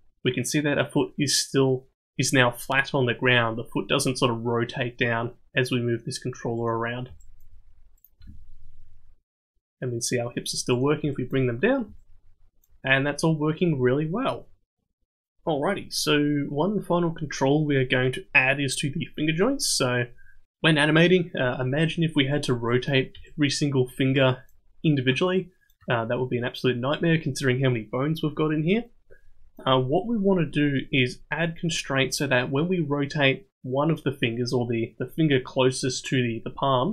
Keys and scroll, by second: 8.2 g.